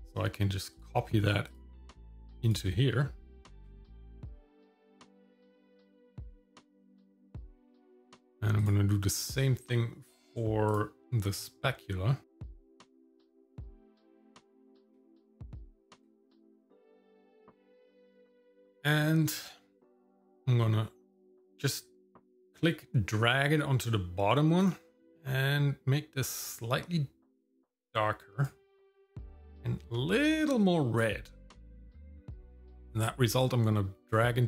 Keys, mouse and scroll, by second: 0.0 click, 0.7 click, 8.6 click, 13.1 click, 17.2 click, 18.0-19.3 scroll up 1, 21.2 click, 24.6 click, 26.4 click, 32.4 click.